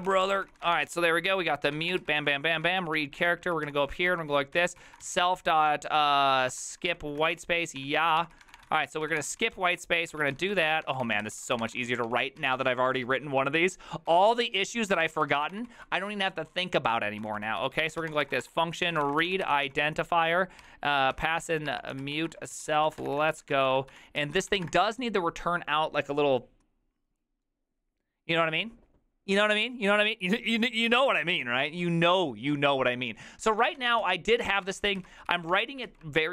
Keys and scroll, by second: 0.0-12.9 typing, 11.4 ctrl+d, 14.0-25.1 typing, 33.6-35.5 typing, 35.3 ctrl+c, 35.4 ctrl+:, 35.6 Return, 35.9 ctrl+u.